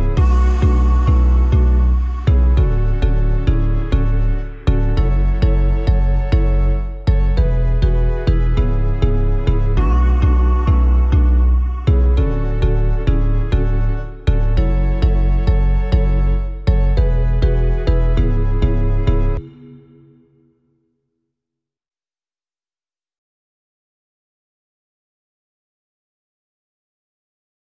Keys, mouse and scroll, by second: 19.4 ctrl+shift+., 19.6 ctrl+shift+., 19.8 ctrl+shift+., 19.9 ctrl+shift+., 20.6 alt+Left, 22.1 alt+Right, 22.6 shift+Left, 23.6 Left, 23.7 Left, 23.9 Left, 24.0 Left, 24.2 Left, 25.3-26.2 scroll.